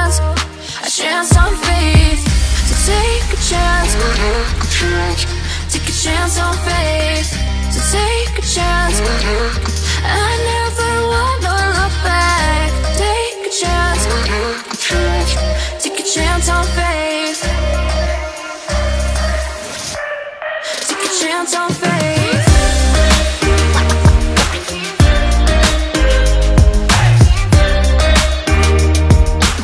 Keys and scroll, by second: 9.6 ctrl+x, 11.4 Delete, 12.7 ctrl+v, 19.7 ctrl+z, 20.5 ctrl+z, 21.7 ctrl+z, 23.6 ctrl+t, 25.8 ctrl+z, 26.5 ctrl+z, 28.3 ctrl+z, 29.5 ctrl+z.